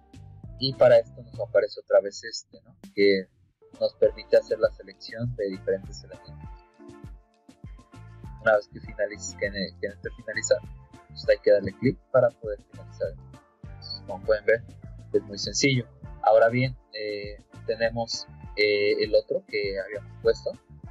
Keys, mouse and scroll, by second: 4.6 click, 5.6 click, 10.3 click, 13.1 middle click, 19.0 click.